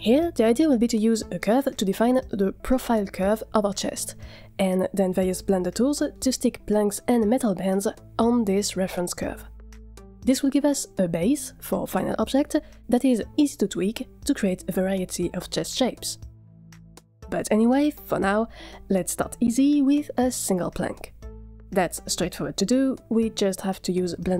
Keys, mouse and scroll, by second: 0.7 click, 1.1 shift+click, 1.4 s, 7.0 click, 7.4 shift+click, 7.7 s, 13.6 click, 14.0 shift+click, 14.3 s, 19.3 click, 20.1 F2, 22.5-22.9 scroll up 3, 22.8 middle click, 23.3 Tab, 23.7-24.3 typing.